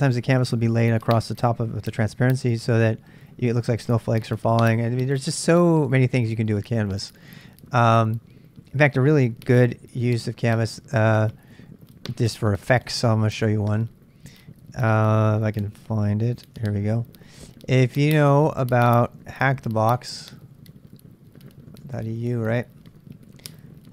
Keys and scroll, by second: 10.4 super+Tab, 11.6-16.4 super+Tab, 18.9-22.6 typing.